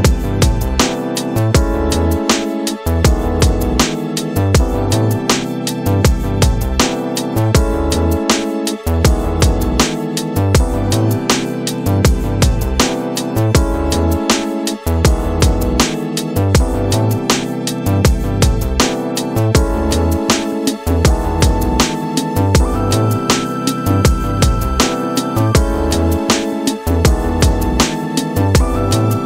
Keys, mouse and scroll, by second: 7.8 click, 8.7 scroll down 2, 10.1 s, 25.0-25.6 middle drag, 25.6-26.1 scroll up 2, 26.1-28.1 middle drag, 28.1 scroll up 2.